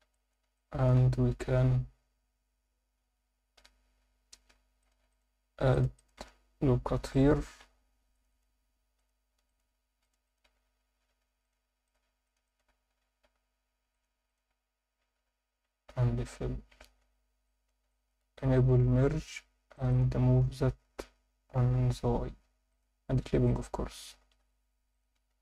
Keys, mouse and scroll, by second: 0.1 alt+shift+middle click, 0.6 ctrl+alt+middle click, 4.8 click, 5.1 shift+click, 5.7 shift+click, 6.0 shift+click, 6.9 f, 7.6 ctrl+r, 8.3 click, 9.0 click, 9.4 shift+click, 10.0 shift+click, 10.3 shift+click, 11.1 f, 11.4 click, 11.8 shift+click, 12.3 shift+click, 12.4 shift+click, 13.3 f, 13.9 click, 14.3 shift+click, 15.1 f, 16.1-16.5 scroll down 3, 16.2 Tab, 17.0 Tab, 17.4 alt+shift+middle click, 17.9 ctrl+alt+middle click, 19.2 scroll up 2, 19.7 click, 21.5 g, 21.7 y, 22.7 click, 23.4 click, 24.2 g, 24.4 y, 24.9 click, 25.1 Tab, 25.2-25.4 scroll down 4.